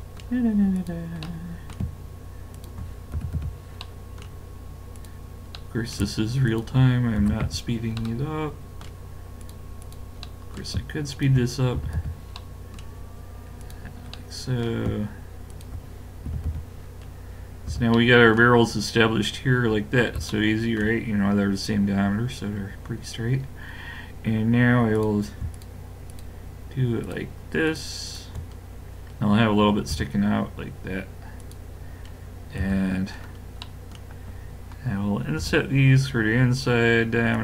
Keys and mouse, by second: 0.8 click, 1.2-3.1 middle drag, 3.1 w, 3.8 middle click, 5.0 middle click, 5.8 click, 7.2 w, 8.0 click, 9.4-10.4 drag, 10.4-12.0 middle drag, 11.8 w, 12.4-14.9 middle drag, 15.1-17.3 drag, 16.3 w, 17.7 a, 25.0-29.9 drag, 29.9 e, 30.4 click, 32.6 KP_Decimal, 35.4 i.